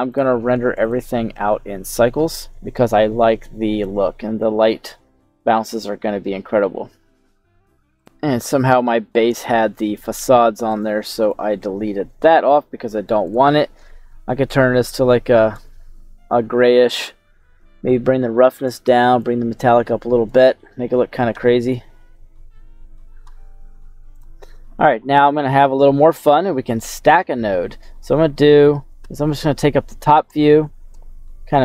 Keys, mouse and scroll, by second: 0.1-1.3 drag, 0.1-0.6 scroll up 3, 3.1 scroll down 2, 4.1 scroll down 1, 4.3-5.8 middle drag, 5.8 click, 6.8 middle click, 6.8 click, 8.0 click, 9.3 middle click, 10.7 click, 11.2 click, 12.5 scroll down 1, 13.2 click, 16.0-16.7 scroll down 4, 18.0 click, 19.2-20.4 drag, 20.6 middle click, 21.1 scroll up 1, 21.3 middle click, 21.9 scroll up 1, 22.5 scroll down 2, 25.8 middle click, 27.5 scroll down 2, 29.0 KP_7, 29.4-30.5 scroll down 2, 30.9 shift+middle click.